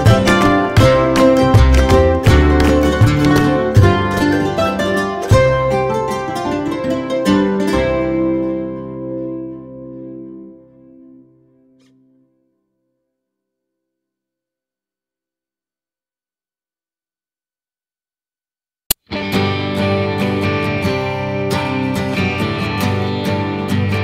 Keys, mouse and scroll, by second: 0.2 click, 0.9 click, 1.7 ctrl+click, 9.7 alt+middle click, 12.0 middle click, 12.6 ctrl+click, 15.4 click, 16.3 click, 17.1 F3, 17.7 alt+middle click, 20.1 click, 20.3 click, 20.8 middle click, 21.3 scroll up 1, 21.5 F4, 22.3 middle click, 23.1 middle click, 23.1 scroll down 1, 23.8 j.